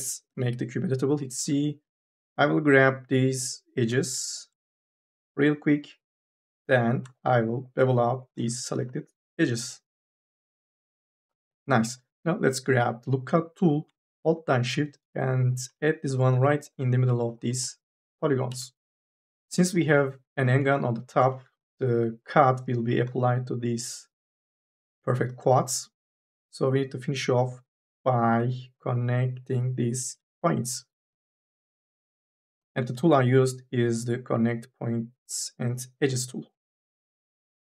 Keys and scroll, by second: 0.1 c, 1.4 2, 8.6 m, 8.9 s, 12.5 k, 12.8 l, 17.2 3, 18.3 e, 19.6 3, 19.8 e, 21.4 2, 22.9 3, 25.8 1, 29.8 m, 33.2 ctrl+z, 37.1 m.